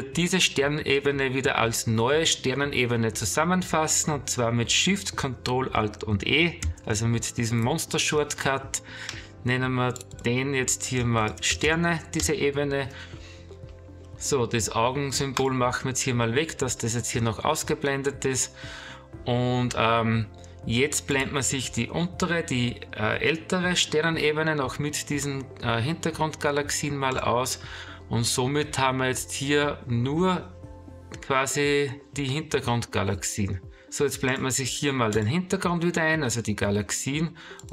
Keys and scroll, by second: 6.6 ctrl+alt+shift+e.